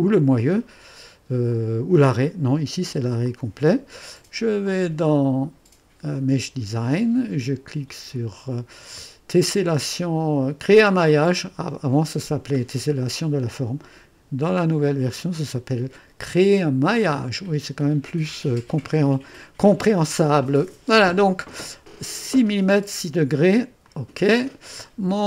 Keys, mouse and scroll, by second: 1.5 click, 3.2-4.0 drag, 4.7 click, 6.1 click, 18.7 click, 23.8 click, 24.8 scroll down 2.